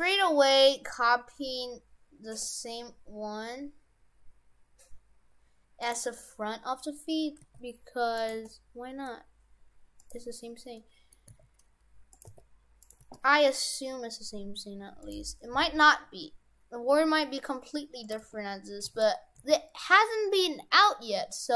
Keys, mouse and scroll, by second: 6.1-7.3 scroll up 2, 7.3 g, 8.3 g, 10.7 middle click, 11.3 s, 12.3 g, 12.9 g, 15.5 s, 18.2 g, 19.4 g.